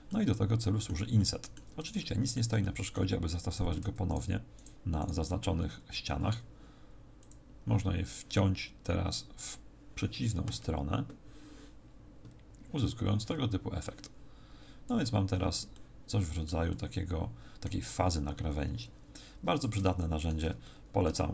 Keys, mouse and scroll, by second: 1.1 middle click, 1.9 shift+middle click, 2.6 shift+middle click, 3.5 right click, 4.5 shift+right click, 4.9 shift+right click, 7.1 click, 10.6 click, 15.7 middle click, 16.7 middle click, 19.3-20.6 scroll down 2, 19.8 shift+middle click, 20.6 middle click.